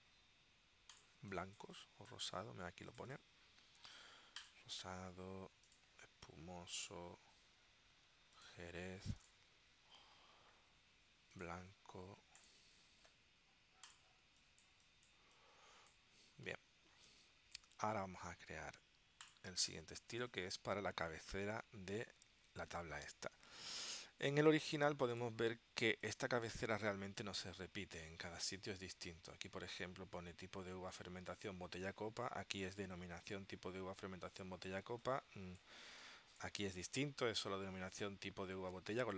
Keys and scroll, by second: 1.3 space, 14.3 space, 17.2 space, 23.0 super+Tab, 24.7 space, 34.9 space, 38.8 space.